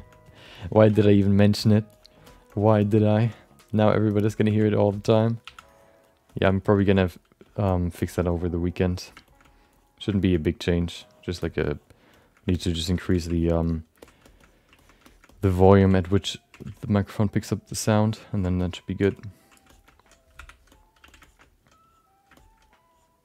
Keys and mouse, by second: 0.4 ctrl+click, 0.8 f, 1.3 click, 1.6 click, 1.9 click, 2.2 alt+shift+middle click, 2.5 alt+middle click, 2.8 alt+shift+middle click, 2.9 middle click, 3.3 click, 3.7 click, 4.1 alt+middle click, 5.4 f, 5.4 2, 5.7 click, 6.0 click, 6.3 alt+shift+middle click, 6.4 middle click, 6.8 f, 7.0 click, 7.4 alt+shift+middle click, 8.0 ctrl+alt+middle click, 8.3 click, 8.6 click, 9.0 middle click, 9.3 alt+shift+middle click, 9.4 middle click, 9.7 click, 10.1 alt+shift+middle click, 10.3 alt+middle click, 10.8 click, 11.4 alt+shift+middle click, 11.7 click, 12.1 shift+middle click, 12.5 shift+middle click, 12.7 alt+middle click, 13.0 f, 13.3 click, 13.6 click, 14.0 alt+shift+middle click, 14.8 ctrl+alt+middle click, 15.0 shift+middle click, 15.2 middle click, 15.5 alt+middle click, 15.8 f, 16.2 click, 16.6 f, 16.7 ctrl+click, 17.4 click, 18.0 ctrl+click, 18.3 alt+click, 18.6 middle click, 18.6 right click, 19.1 click, 19.7 alt+shift+middle click, 19.8 alt+middle click, 20.4 5, 20.7 alt+middle click, 21.0 f, 21.2 alt+shift+middle click, 21.4 alt+middle click, 21.8 click, 22.4 alt+shift+middle click, 22.9 click.